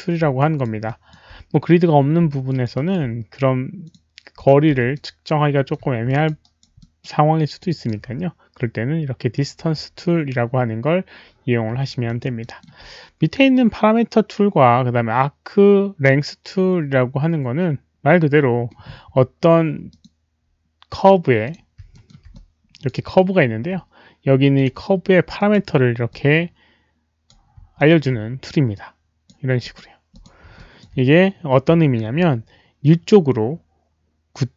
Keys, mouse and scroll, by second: 0.3 alt+right click, 0.5 alt+middle click, 0.5 q, 0.8 alt+click, 0.9 alt+middle click, 0.9 q, 1.7 alt+click, 1.7 alt+right click, 1.7 alt+middle click, 1.7 q, 2.4 alt+click, 2.7 alt+right click, 3.8 click, 3.9 alt+right click, 3.9 alt+middle click, 3.9-5.4 typing, 4.4 click, 4.9-5.7 alt+middle drag, 4.9 alt+right click, 6.0 alt+click, 6.4 alt+right drag, 6.8 alt+middle drag, 7.6 alt+click, 11.2 alt+click, 11.2 alt+right click, 12.0 alt+drag, 12.4 alt+middle drag, 12.5 alt+w, 12.5 alt+right click, 14.6 alt+click, 15.2 alt+middle click, 15.2 w, 19.9 alt+click, 21.4 click, 22.0 alt+middle click, 22.3 alt+click, 23.0 alt+middle click, 23.5 click, 23.5 alt+middle click, 24.5 click, 25.3 click, 26.1-27.3 drag, 27.7 alt+middle click, 28.7 click, 29.6 click, 29.6 alt+middle click, 30.1 click, 30.5 alt+click, 30.5 alt+middle click, 31.4 alt+click, 31.6 alt+click, 31.7 alt+middle click, 31.7 alt+click, 32.1 alt+click.